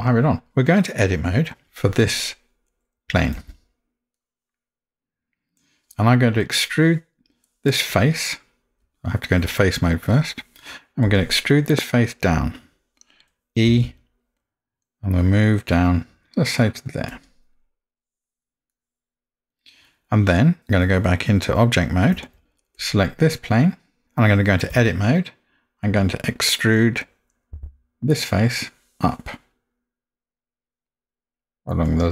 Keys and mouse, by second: 3.4 Tab, 4.2-5.6 middle drag, 10.2 click, 11.0 click, 11.9-12.5 middle drag, 13.8 e, 18.7 middle click, 22.2 Tab, 24.8 Tab, 27.6 e.